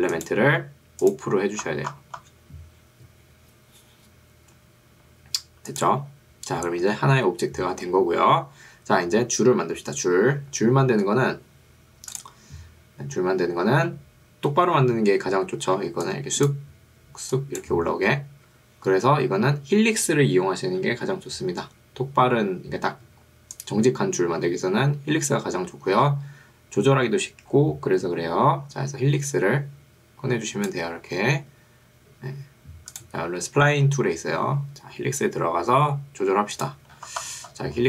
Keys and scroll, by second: 15.8 ctrl+2, 18.6 Escape.